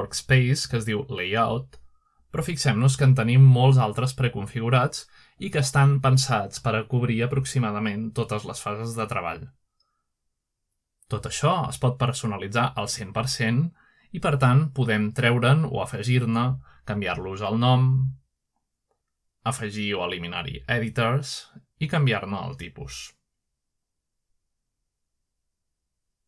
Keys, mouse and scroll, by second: 1.2 click, 4.2 click, 5.2 click, 6.3 click, 7.0 click, 7.9 click, 9.6 click, 10.5 drag, 11.0 click, 12.0 click, 12.6 click, 13.3 click, 13.9 click, 14.4 drag, 16.4 right click, 18.0 click, 18.8 right click, 19.5 click, 20.3 click, 20.5 click, 21.6 BackSpace, 22.1 BackSpace, 22.2 BackSpace, 23.3-25.6 typing.